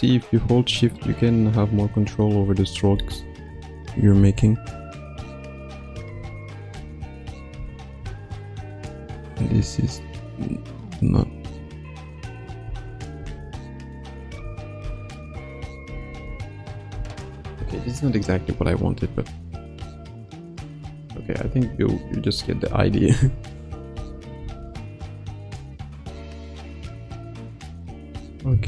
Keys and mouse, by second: 3.2-4.2 ctrl+alt+middle drag, 4.2 Left, 4.5 Right, 5.7 click, 6.1 space, 6.7 space, 7.5 space, 8.0 space, 8.9-12.5 drag, 12.6 space, 13.2 space, 13.9 click, 14.4 space, 14.8 space, 15.3 click, 15.8 space, 16.2 space, 16.5 click, 16.9 space, 17.5 space, 18.3-19.2 drag, 19.7 click, 21.4 x, 22.3 click, 22.6 space, 23.1 space, 23.6 click, 23.9 space, 24.3 space, 25.1 click, 25.7-27.8 drag.